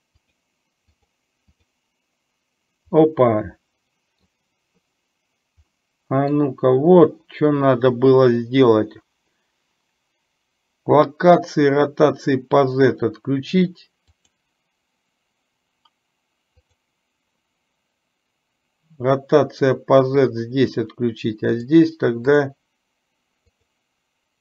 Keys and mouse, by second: 0.3 click, 1.1 click, 1.6 click, 3.0-4.3 middle drag, 5.9-6.4 middle drag, 14.3 click, 16.6 click, 21.6 click, 22.4 click.